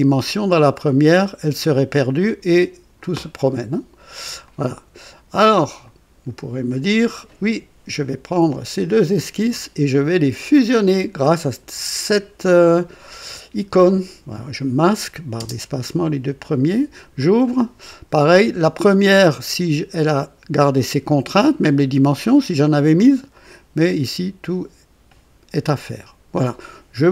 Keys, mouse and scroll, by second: 2.2-3.2 drag, 4.4 click, 5.6 click, 9.1 ctrl+click, 11.4 click, 15.3 space, 16.5 click, 17.0 click, 23.3-24.1 drag, 26.4 click.